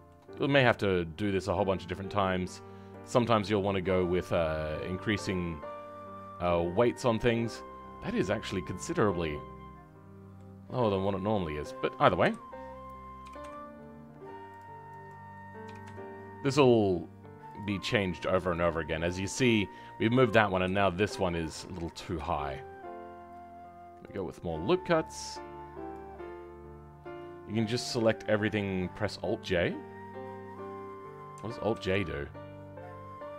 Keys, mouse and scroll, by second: 0.5-7.0 right drag, 10.3 right click, 10.9 middle click.